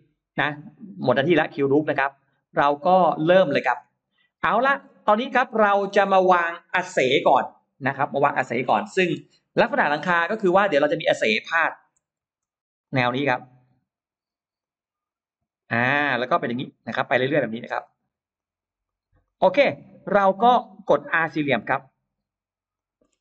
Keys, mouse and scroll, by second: 0.4 click, 1.8 click, 2.2 click, 2.4-2.8 scroll up 1, 2.6 middle click, 3.0-3.4 scroll down 1, 3.5-4.2 scroll up 2, 4.1 middle click, 4.4 scroll down 1, 5.2 middle click, 9.4-9.8 scroll down 1, 10.0 middle click, 12.0 shift+x, 12.7-13.9 drag, 12.7 shift+x, 14.4-15.4 drag, 15.6 click, 16.4 click, 17.1 click, 17.7 shift+click, 18.2 shift+click, 18.7 shift+click, 19.1 shift+click, 19.4 shift+right click, 20.6-20.9 scroll up 1, 22.1 r, 22.6 click, 22.8-23.2 scroll down 2.